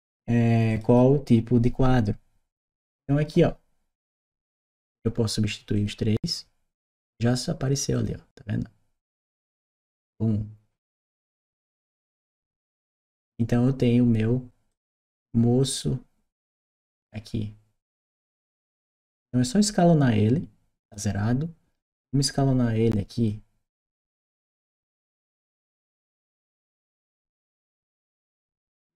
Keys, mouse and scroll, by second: 0.5 click, 0.6 click, 2.4 click, 3.8 click, 5.5 click, 7.7 click, 9.1 click, 12.0 click, 14.5 click, 15.5 click, 18.8 click, 21.6 click, 23.0 click.